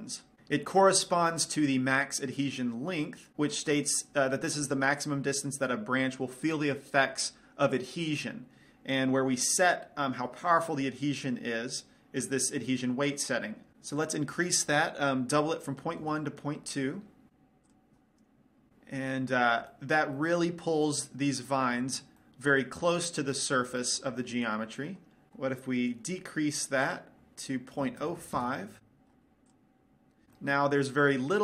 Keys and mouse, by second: 14.5-16.3 drag, 18.1 click, 19.1-25.3 middle drag, 27.4-29.0 drag, 30.0 click, 30.9 middle click.